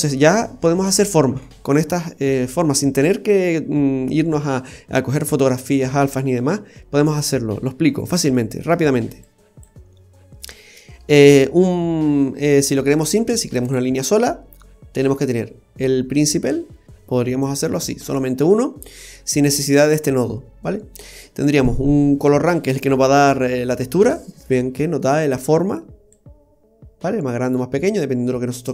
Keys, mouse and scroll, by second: 2.7-3.5 scroll down 6, 7.6-8.4 scroll up 6, 8.3 middle click, 9.2 click, 13.4 click, 14.6 middle click, 16.8 click, 20.9 scroll up 1, 24.5-24.8 scroll up 2, 25.1 middle click, 26.1 click.